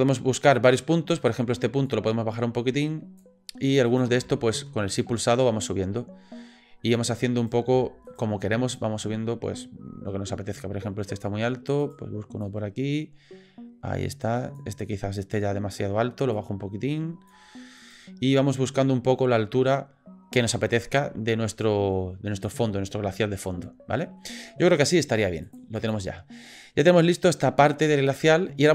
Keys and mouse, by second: 0.7 click, 1.9-3.2 drag, 3.9 click, 4.9 shift+click, 5.7-6.9 drag, 7.4 click, 8.1 shift+click, 8.8-11.2 drag, 11.8 click, 12.4-14.6 drag, 16.3 click, 17.8 click, 18.4-19.7 drag, 20.4 click, 20.9-22.5 drag, 22.7-24.2 middle drag, 25.6 click, 26.8-28.6 middle drag.